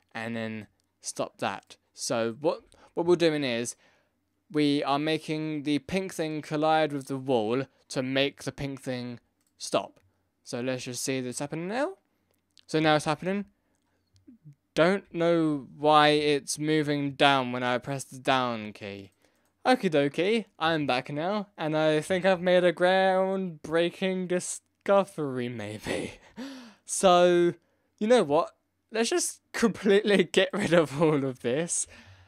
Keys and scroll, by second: 13.0 Down, 15.0 Up, 15.5 Left, 15.8 Right, 15.9 Up, 15.9 Left, 16.1 Down.